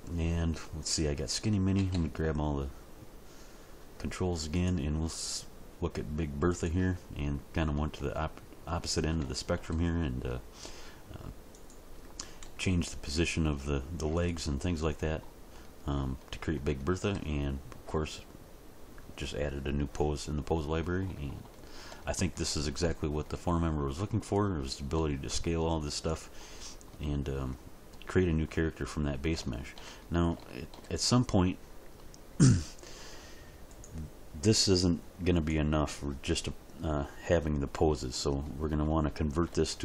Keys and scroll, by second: 1.7 a, 12.4 g, 24.9 s.